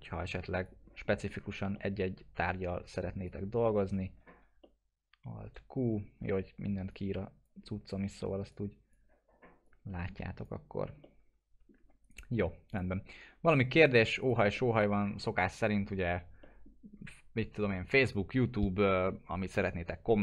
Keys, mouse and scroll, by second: 0.5 click, 1.1 middle click, 1.3 scroll down 1, 1.7-2.6 alt+middle click, 2.6 scroll down 1, 3.2-3.8 click, 4.2 alt+q, 4.6-6.1 alt+middle drag, 6.9-11.0 drag, 11.0 alt+middle click, 12.0 right click, 12.7 click, 13.0-13.4 scroll down 1, 13.6 middle click, 14.2 click, 14.5 middle click, 14.8 scroll down 1, 16.4 middle click.